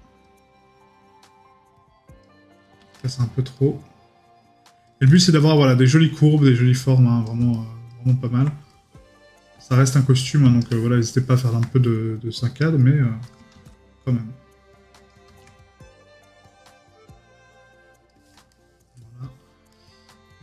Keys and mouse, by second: 11.1 middle click.